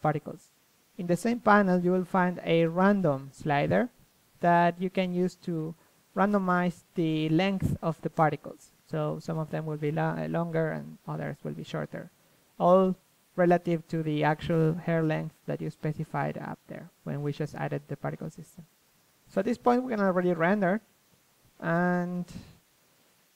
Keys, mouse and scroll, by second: 2.9 click, 4.7-7.0 middle drag, 7.5 ctrl+Tab, 7.8 a, 9.0-11.0 drag, 14.6 click, 17.9-19.8 middle drag, 19.8 KP_1, 20.2 KP_3, 22.0 middle click, 22.6 KP_0, 23.0 middle click.